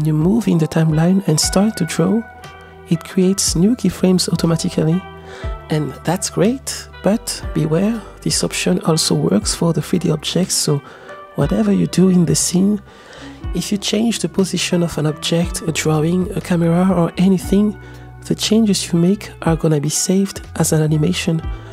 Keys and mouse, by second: 1.6 click, 2.1 click, 2.5 click, 3.2 click, 3.3 click, 6.4 click, 6.8 click, 7.2 click, 7.8 click, 7.9-10.8 drag, 13.4-13.9 drag, 15.3 g, 16.8-17.6 drag, 18.5 g, 19.7 r, 19.8 z, 21.0-21.5 drag.